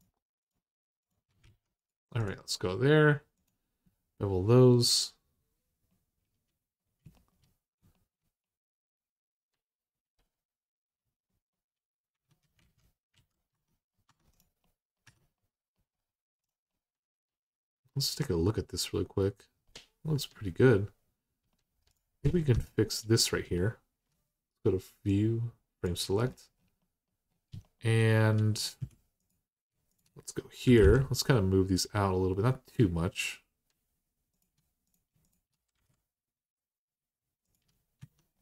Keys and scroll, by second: 1.2 alt+z, 11.9 Tab, 12.4 alt+z, 12.9 alt+z, 13.3 Tab, 13.8 Tab, 14.8 Tab, 22.2 Tab, 28.6 1, 30.4 typing, 35.4 typing, 37.8 Tab.